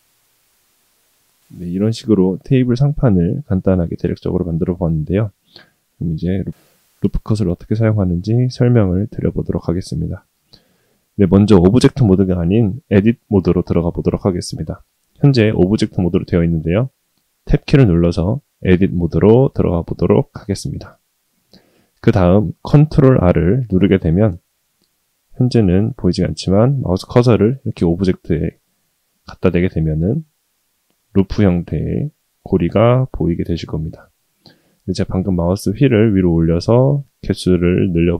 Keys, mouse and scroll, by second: 0.5 g, 1.0-1.5 shift+middle drag, 24.3 ctrl+r.